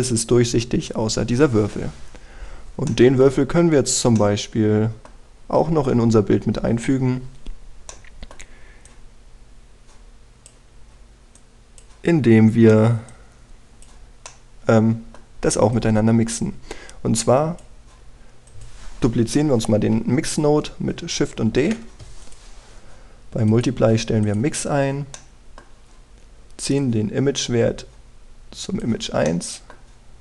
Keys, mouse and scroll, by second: 2.2-3.6 scroll down 1, 3.6 middle click, 4.0-4.8 scroll down 1, 4.8 middle click, 5.8-6.4 scroll down 1, 6.4-6.9 scroll up 1, 8.6 middle click, 9.6-11.5 drag, 13.0-13.8 scroll up 1, 13.8 click, 15.0 middle click, 16.4-18.5 drag, 22.2 shift+d, 22.9 click, 23.6 scroll up 1, 24.2 click, 25.4-25.8 scroll down 1, 25.8 middle click, 27.4-29.5 drag, 29.9 middle click.